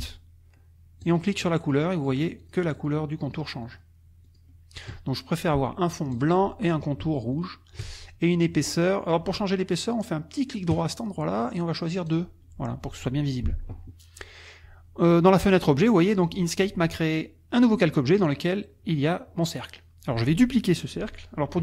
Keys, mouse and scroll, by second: 1.0 shift+click, 1.4 shift+click, 2.0 shift+click, 2.4 shift+click, 2.8 shift+click, 3.3 shift+click, 3.6 shift+click, 4.3 shift+click, 6.1 click, 7.3 shift+click, 10.7 right click, 12.1 click.